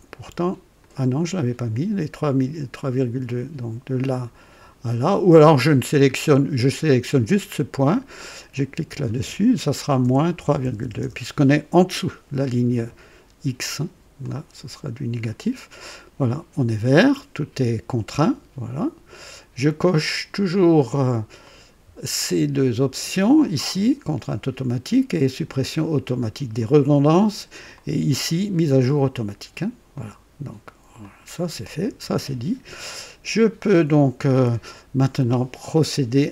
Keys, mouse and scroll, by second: 0.8 click, 1.7 click, 3.2 click, 8.5 click, 10.0 KP_Subtract, 10.2 KP_Subtract, 10.3 KP_3, 10.6 KP_Decimal, 10.8 KP_2, 10.9 Return, 14.2-15.4 drag, 21.4 click, 26.5 click, 27.7 click, 29.9 click, 31.0 click.